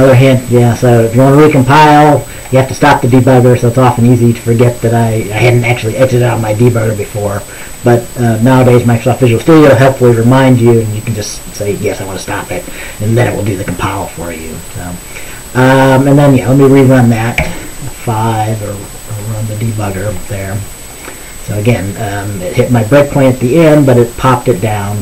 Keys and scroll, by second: 17.5 F5.